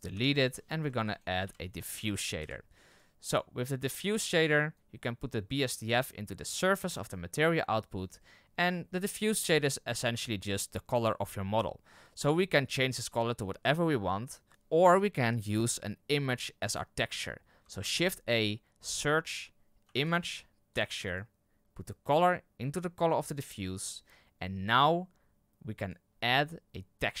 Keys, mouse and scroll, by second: 0.2 Delete, 6.5-12.9 drag, 23.3-27.2 drag.